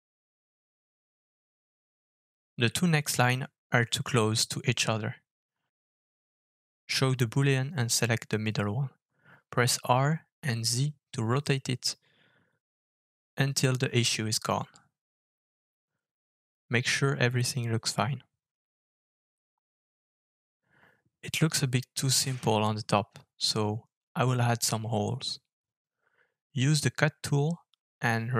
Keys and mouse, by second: 0.2-0.7 middle drag, 1.3-1.9 shift+middle drag, 2.0-3.6 middle drag, 3.9-4.3 shift+middle drag, 5.5 shift+middle drag, 8.1 shift+middle drag, 9.6 click, 11.2 r, 14.6 Tab, 15.9 Tab, 18.0 middle drag, 18.5-20.8 middle drag, 21.4-23.6 middle drag, 23.8 click, 25.0 alt+f.